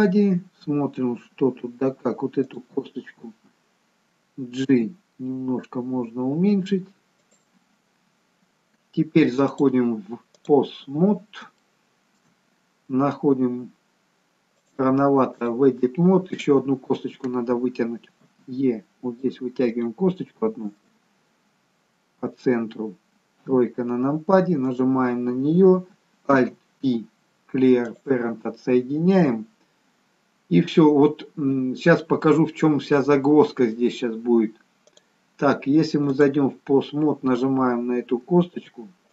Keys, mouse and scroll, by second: 0.6-1.2 scroll up 2, 4.8 g, 8.6-9.6 scroll down 1, 9.6 click, 9.6-11.1 scroll down 1, 12.5 shift+middle click, 14.7 click, 16.4 click, 18.5 e, 20.8 middle click, 23.4 KP_3, 24.8 click, 26.5 alt+p, 35.0 click.